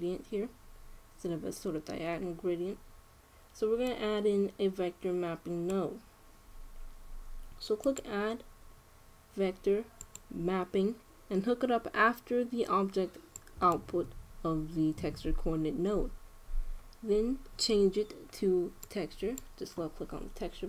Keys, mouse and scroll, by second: 4.6-6.3 drag, 8.5-10.3 drag, 19.7-20.6 drag.